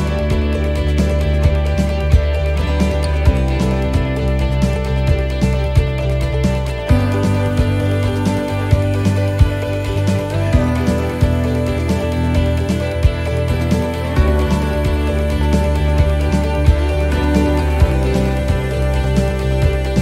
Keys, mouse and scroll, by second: 0.1 shift+middle click, 1.3 middle click, 1.5 scroll up 1, 1.8 middle click, 2.3 shift+middle click, 2.7 scroll up 1, 3.1 shift+middle click, 3.8 middle click, 5.2 right click, 5.7 middle click, 6.6 scroll down 1, 7.0 shift+middle click, 7.3-7.9 scroll down 2, 7.9 middle click, 9.3 click, 12.4 shift+middle click, 13.4-14.0 scroll up 3, 13.8 middle click, 14.3 shift+middle click, 14.7 middle click, 15.8 right click, 16.9 click, 18.2 right click, 18.7 shift+right click.